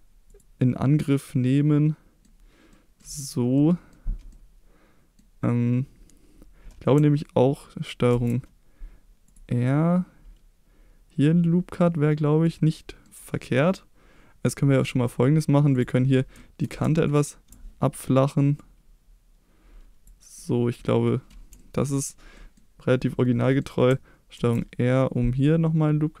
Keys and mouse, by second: 0.6-2.2 middle drag, 2.7 middle click, 3.5 middle click, 4.3 middle click, 8.1 ctrl+r, 12.4 click, 12.7 middle click, 16.3 shift+middle click, 17.0 ctrl+click, 18.5-20.0 drag, 20.3 middle click, 21.0 middle click, 22.3 middle click, 23.5 middle click, 24.3 ctrl+r.